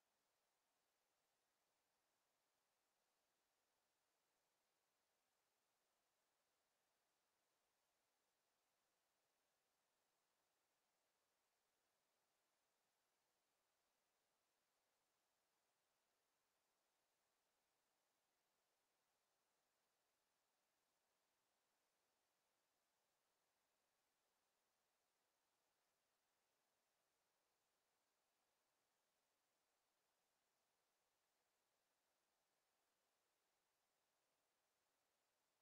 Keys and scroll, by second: 25.9 ctrl+z, 27.9 ctrl+z.